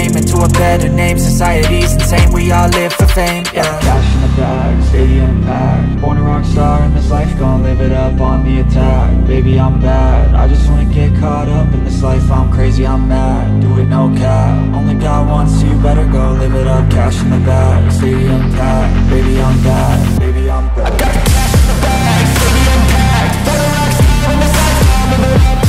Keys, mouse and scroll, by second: 0.4 ctrl+v, 2.6 ctrl+v, 4.1 right click, 6.4 scroll up 1, 7.5-8.7 scroll down 1, 8.7-9.8 scroll up 1, 9.8 middle click, 11.6 typing, 19.7-20.9 scroll down 1, 23.1-24.3 scroll up 1.